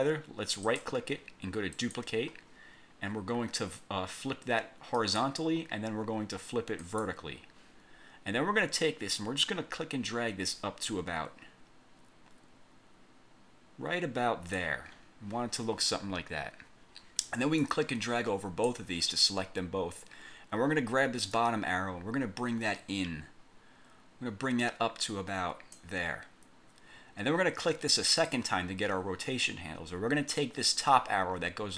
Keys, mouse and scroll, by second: 0.8 right click, 1.9 click, 5.1 click, 6.9 click, 9.2-14.9 drag, 17.7-19.0 drag, 21.5-26.1 drag, 28.4 click.